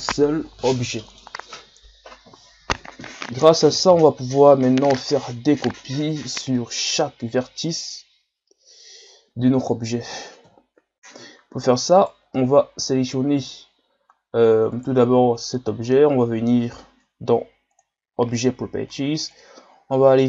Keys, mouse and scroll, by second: 4.8-5.9 scroll up 3, 5.9 scroll down 1, 6.6-9.6 middle drag, 10.4 KP_1, 11.2-12.0 scroll up 1, 12.0 right click, 12.3 scroll down 3, 13.0 scroll up 3, 14.8 right click, 17.7-18.7 drag, 19.3-20.2 drag.